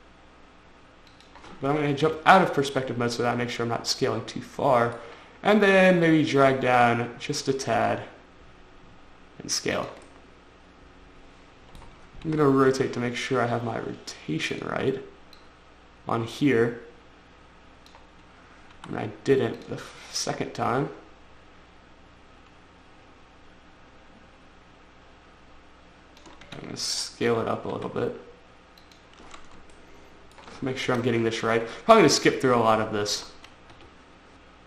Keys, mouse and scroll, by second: 1.5 click, 2.5 5, 3.2 middle click, 3.5-4.1 scroll down 1, 6.3 click, 8.1 click, 10.2 click, 10.3 click, 10.5 middle click, 12.7 middle click, 15.0 click, 15.8 click, 19.2 r, 20.0 click, 20.1 click, 20.6 click, 26.9 click, 28.2 s, 29.2 click, 30.2 shift+middle click, 31.3 1, 32.2 shift+middle click, 32.8-33.2 scroll up 4, 34.2 5.